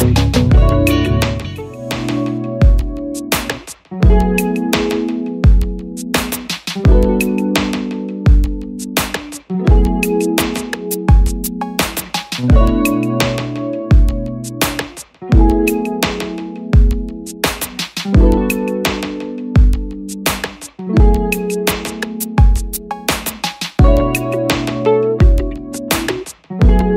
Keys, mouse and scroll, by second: 2.0 click, 13.9 click, 20.9 double click, 25.2 Return.